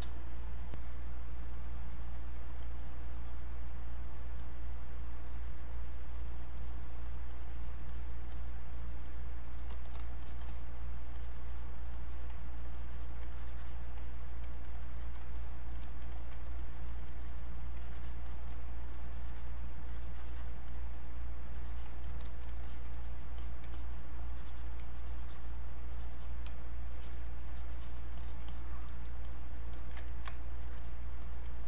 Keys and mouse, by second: 0.7 click, 2.8 click, 3.8 click, 6.1-9.6 drag, 10.2 alt+click, 12.0 click, 12.8 alt+click, 13.3 click, 14.1 click, 14.6 alt+click, 16.6 alt+click, 17.8 click, 19.9 click, 20.7 click, 22.0 click, 24.3-25.8 alt+drag, 25.8 click, 26.9 alt+click, 27.4 click, 28.5 click, 29.7 alt+click, 30.1 ctrl+right click, 30.5-31.6 ctrl+drag.